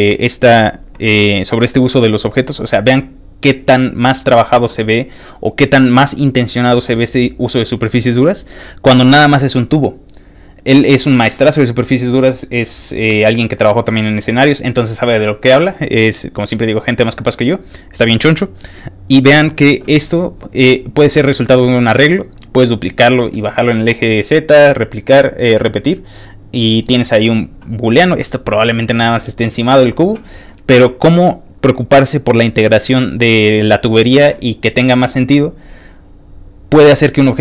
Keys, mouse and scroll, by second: 35.4 ctrl+click.